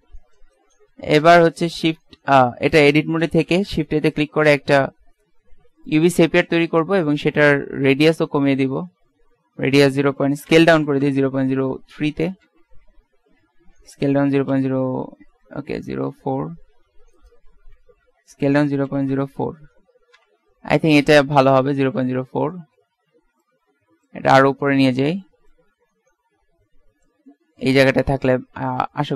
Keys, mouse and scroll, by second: 0.0 x, 1.0 z, 2.0 Tab, 2.9 a, 3.7 shift+a, 6.4-8.3 middle drag, 10.2 s, 12.5 KP_Decimal, 13.8 s, 17.6 ctrl+z, 18.4 s, 23.5-25.2 drag, 25.6 click, 25.9 middle click, 26.8 click, 27.9 KP_Decimal, 28.5 middle click.